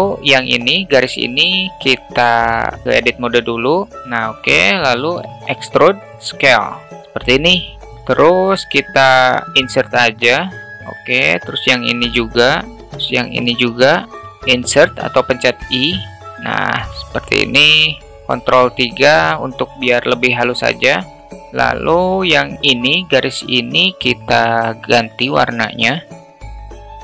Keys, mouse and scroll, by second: 1.1-1.9 alt+middle drag, 2.2 Tab, 4.0 a, 5.3 e, 6.1 s, 6.8-8.0 alt+middle drag, 8.0 Tab, 8.5 alt+middle click, 9.3 i, 14.0 alt+middle click, 14.3 i, 16.1 Tab, 16.6-17.5 alt+middle drag, 18.1 ctrl+3, 18.4-19.0 alt+middle drag, 20.4 alt+middle drag, 21.5 click.